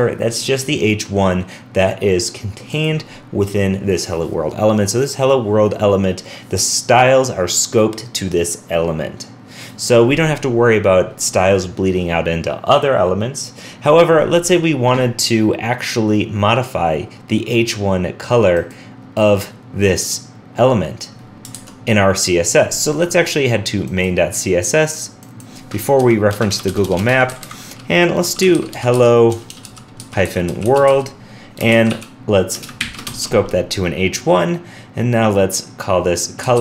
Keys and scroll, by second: 21.5 super+Tab.